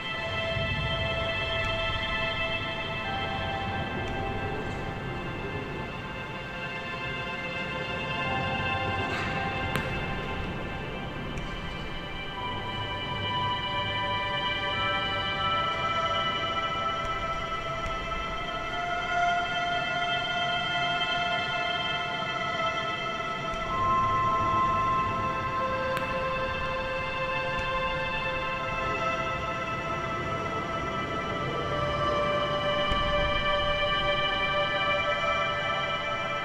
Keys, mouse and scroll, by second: 0.1-0.6 scroll down 5, 0.6 a, 0.8 a, 1.4-3.0 shift+middle drag, 3.0 Tab, 3.4-5.2 scroll down 2, 6.3 click, 10.3-10.9 drag, 10.9 a, 11.1 a, 11.8-12.3 shift+middle drag, 12.3-13.3 scroll up 1, 13.3 click, 13.6-14.0 scroll up 1, 14.0 Tab, 14.7 2, 14.7 click, 15.1 scroll up 2, 15.5 g, 16.9 click, 17.7 g, 19.0 a, 19.2 a, 19.3 scroll down 3, 19.5 Tab, 19.9 a, 20.1 a, 20.7 click, 21.0 scroll up 1, 21.3 Tab, 21.9-22.5 scroll up 1, 22.5 click, 22.7 click, 23.3 a, 23.4 a, 24.0 click, 24.8 shift+middle click, 25.3-26.0 scroll up 6, 26.0 g, 29.3 scroll down 1, 29.6 a, 29.8 a, 30.4-31.9 shift+middle drag, 31.9 click, 32.4 click, 32.8 ctrl+KP_Add, 33.5 r, 34.3 g.